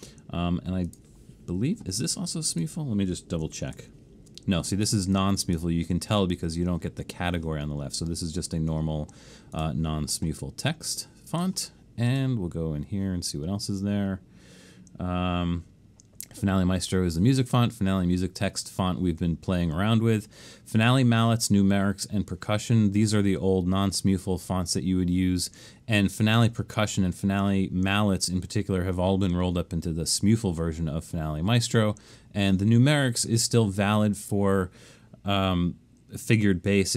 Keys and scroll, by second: 3.8 alt+shift+super+s.